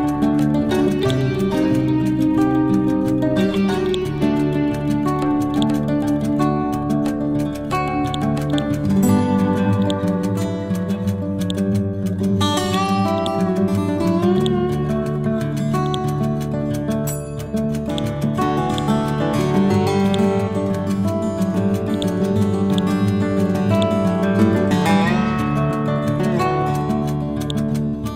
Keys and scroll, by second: 16.8 t, 17.2 c.